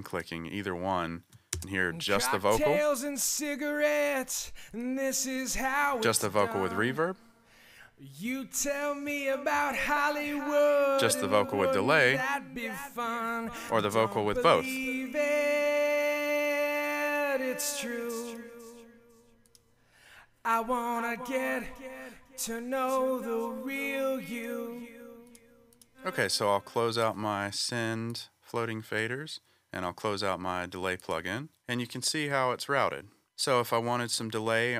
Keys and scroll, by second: 1.5 space, 2.0 space, 25.9 space.